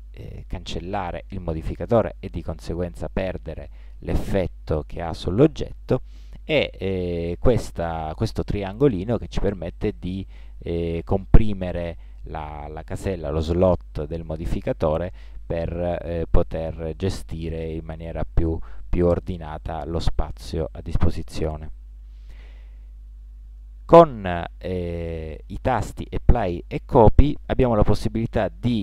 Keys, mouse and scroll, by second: 9.3-11.1 drag, 14.1-15.7 drag, 17.2-18.9 drag, 21.4-23.3 drag.